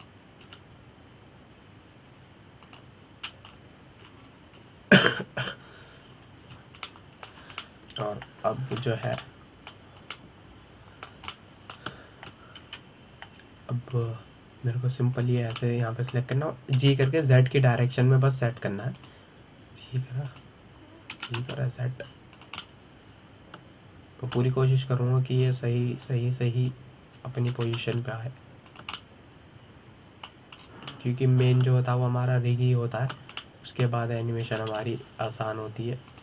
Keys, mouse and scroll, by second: 1.4 click, 2.1 g, 4.4 click, 5.1 scroll down 2, 5.8-6.6 scroll up 2, 6.6-8.5 scroll up 1, 8.5-10.2 shift+middle drag, 10.2 scroll down 5, 10.4-14.3 shift+middle drag, 14.3 KP_1, 15.7-16.8 scroll up 4, 16.8 click, 17.3-18.4 middle drag, 18.4 g, 20.7 click, 21.9 click, 22.8 g, 24.3-27.3 middle drag, 27.7 click, 29.2 g, 30.5 click, 30.6-32.3 middle drag, 32.3-32.6 scroll up 3, 32.6-36.1 middle drag, 36.1 g.